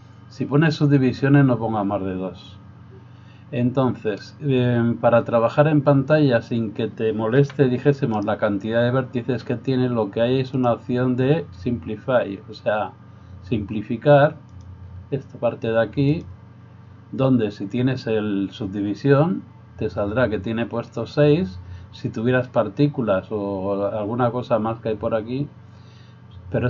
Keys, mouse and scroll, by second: 0.0-11.4 drag, 7.4 g, 14.6-16.6 drag.